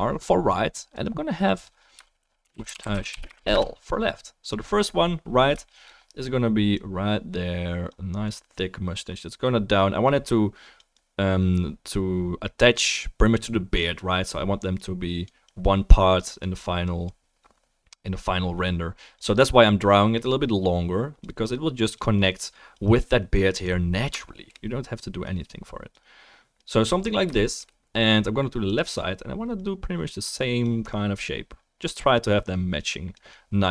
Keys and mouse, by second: 4.5-6.7 middle drag, 28.7 click.